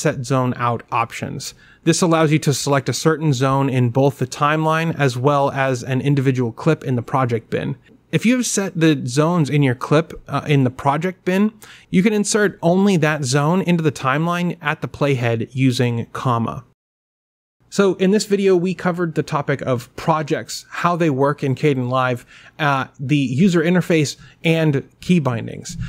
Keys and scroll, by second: 1.1 o, 6.5 i, 8.2 o, 12.7 ,.